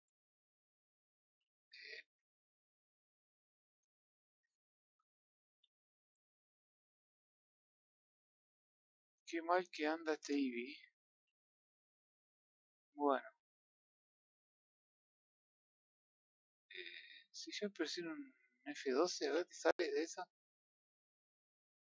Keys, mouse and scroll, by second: 0.8-1.1 middle drag, 1.1 scroll up 3, 1.5-1.9 scroll down 2, 2.3 r, 7.3-10.2 drag, 10.2 KP_0, 13.3-16.2 drag.